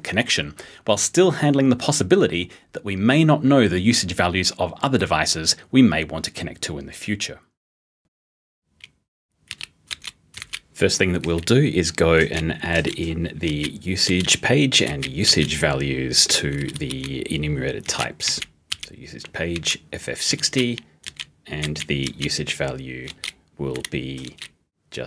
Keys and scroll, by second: 16.6 p, 17.7-22.1 typing, 23.1-25.0 typing.